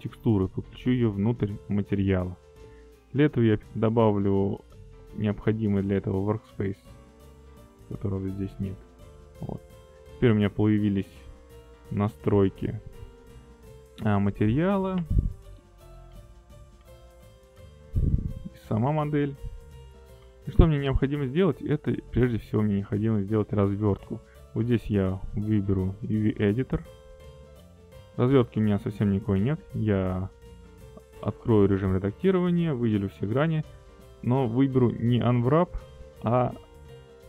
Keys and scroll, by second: 30.3 a, 34.9 u.